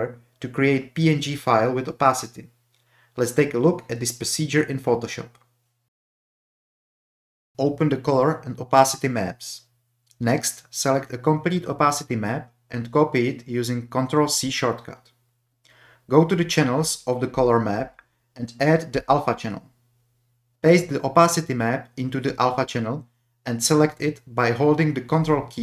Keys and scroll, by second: 0.0-0.9 typing, 12.2 ctrl+a, 13.7 ctrl+c, 22.6 ctrl+v.